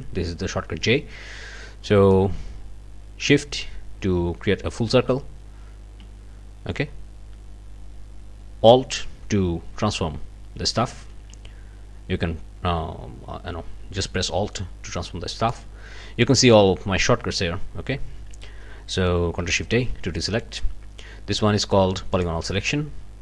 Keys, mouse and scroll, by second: 2.1-15.7 drag, 19.7 ctrl+shift+a, 22.1 click.